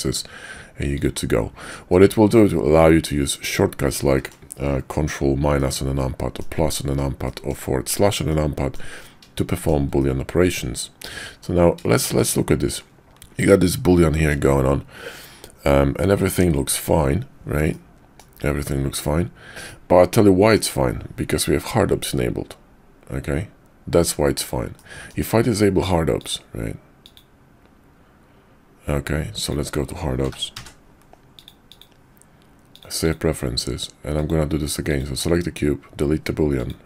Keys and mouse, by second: 1.9-3.0 middle drag, 3.9-4.3 middle drag, 5.6-6.4 middle drag, 7.3 shift+middle drag, 8.2-8.8 middle drag, 9.5 shift+middle click, 10.0-11.4 middle drag, 12.0 shift+middle drag, 12.8 middle click, 13.4-14.3 middle drag, 17.7-18.2 middle drag, 19.7-20.6 middle drag, 24.8-25.1 middle drag, 26.4-27.2 drag.